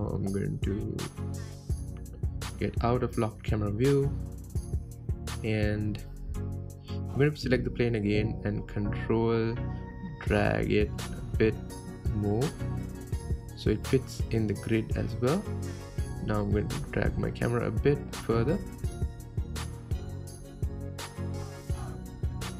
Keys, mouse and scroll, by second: 0.9 n, 2.4 click, 3.6 n, 3.9-4.3 middle drag, 4.3-4.7 scroll down 6, 5.1-6.4 middle drag, 6.4 KP_7, 8.3 click, 9.1 g, 14.9 KP_0, 16.6 click, 17.1 click, 17.9 g.